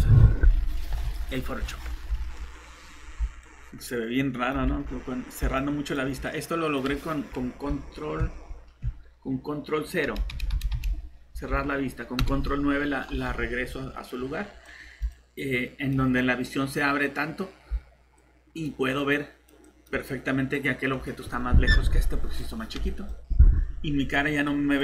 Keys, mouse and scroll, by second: 2.1 alt+Tab, 3.7-4.5 typing, 4.8 alt+Tab, 5.9-7.0 typing, 10.1 typing, 10.3 ctrl+0, 13.7 Escape.